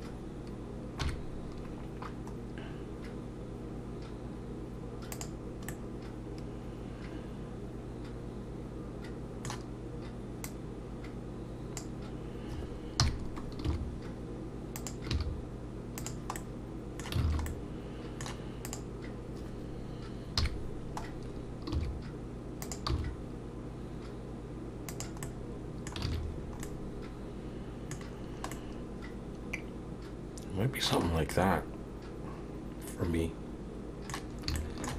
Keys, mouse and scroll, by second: 1.0 KP_3, 5.1 click, 5.7 middle click, 10.5 click, 13.0 KP_3, 13.6 r, 15.1 g, 16.4 middle click, 17.3 alt+a, 17.5 middle click, 18.7 click, 20.4 KP_3, 21.1-21.7 scroll up 1, 21.7 r, 22.9 g, 25.2 middle click, 26.1 alt+a, 26.4 scroll down 3, 26.6 middle click, 28.1-28.5 scroll down 2, 28.5 middle click, 31.1 scroll up 3, 31.3 middle click, 34.4 scroll up 2, 34.6 shift+middle click.